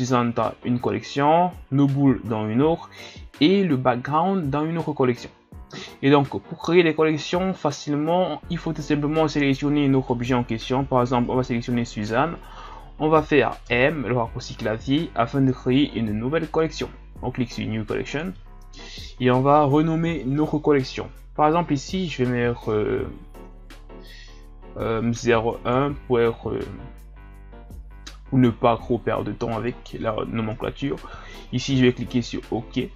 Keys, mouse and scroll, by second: 10.0-13.6 right drag, 13.6 m.